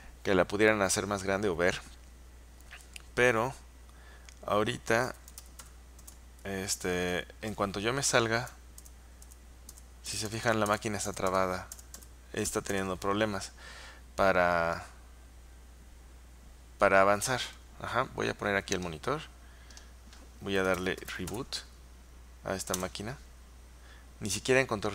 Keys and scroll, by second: 3.4 Return, 4.9-6.2 typing, 8.5 Return, 8.9 Return, 9.3-11.2 Return, 20.5-21.9 typing, 22.9 Return.